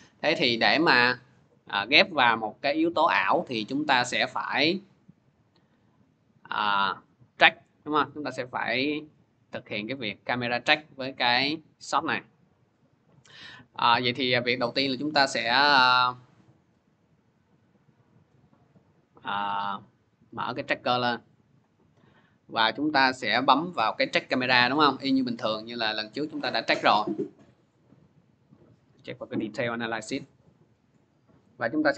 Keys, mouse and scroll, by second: 6.6-8.9 drag, 9.7 click, 10.5 click, 11.1 click, 11.6 scroll, 14.2 click, 20.4 click, 21.3-23.9 drag, 24.0 click, 26.6 click, 28.9 click, 29.5 click.